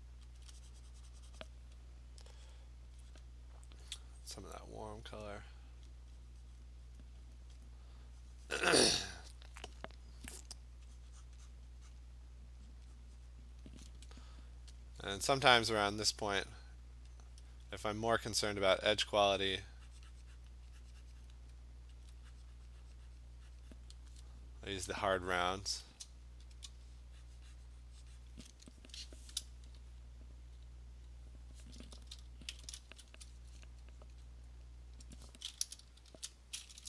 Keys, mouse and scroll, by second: 0.4 alt+click, 1.5 click, 3.8 alt+click, 4.3 click, 5.2 click, 5.4-8.9 alt+click, 5.9 click, 6.5 alt+click, 6.6 click, 7.0 click, 7.6 click, 8.5 click, 8.9 click, 9.1 click, 11.0 click, 11.3 click, 11.5 click, 11.9 click, 13.0 click, 13.2 click, 14.1 click, 14.8 click, 17.1 alt+click, 17.2 alt+click, 17.6 click, 17.7 alt+click, 18.5 click, 19.0 alt+click, 19.6 click, 20.5 click, 21.3 click, 22.0 alt+click, 23.2 click, 23.7 click, 23.7 click, 25.0 click, 26.5 click, 27.0 click, 27.2 click, 28.3 click, 32.5 ctrl+shift+n, 32.9 Return, 36.1 shift+4.